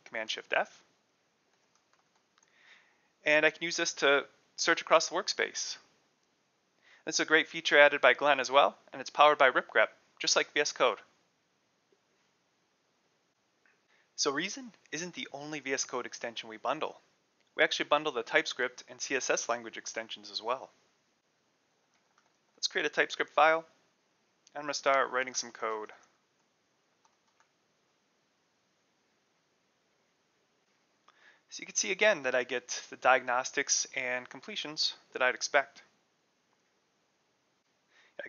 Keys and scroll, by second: 1.1-2.7 typing, 12.9 super+f, 21.2-23.2 typing, 24.4-27.9 typing, 33.8-35.6 typing, 38.2 Return.